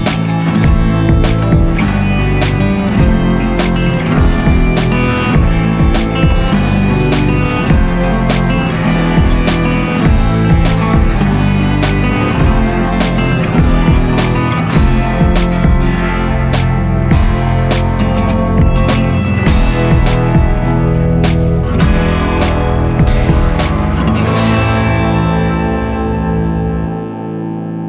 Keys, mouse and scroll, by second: 2.7 ctrl+z, 5.4 ctrl+z, 5.9 ctrl+z, 11.2 ctrl+click, 12.5 ctrl+click, 12.8 ctrl+shift+i, 14.7 ctrl+d, 15.1 ctrl+=, 15.3 ctrl+=, 15.5 ctrl+=, 19.7 ctrl+0.